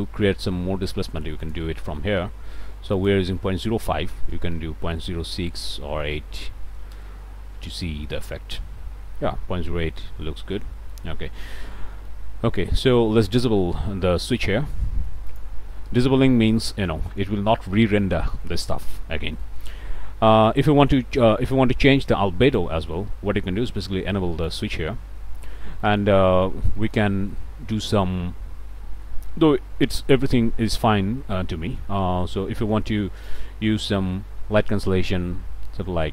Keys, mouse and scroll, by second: 4.3 ., 4.5 0, 5.5 6, 6.5 BackSpace, 6.7 8, 7.0 Return, 8.1-11.2 drag, 11.3 middle click, 11.8 click, 14.3 click, 15.3 ctrl+shift+click, 18.3 click, 19.1 scroll down 2, 19.4 middle click, 19.8 scroll up 1, 22.4 click, 24.5 ctrl+shift+click, 25.8 click, 26.2 middle click, 26.8 click, 27.3 click, 29.3 click, 33.3-36.1 drag.